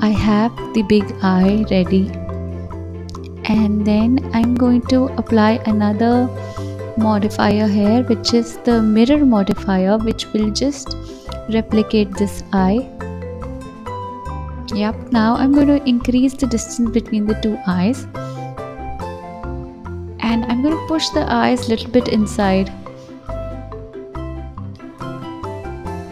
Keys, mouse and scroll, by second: 0.1 click, 0.8-1.7 scroll up 1, 1.7 s, 2.9 g, 3.8 s, 7.2 click, 8.0 click, 10.7-13.8 drag, 15.1 click, 18.9 g, 21.1 click, 21.6-24.1 middle drag, 24.1 KP_7, 24.7-25.8 scroll down 2, 25.8-26.1 drag.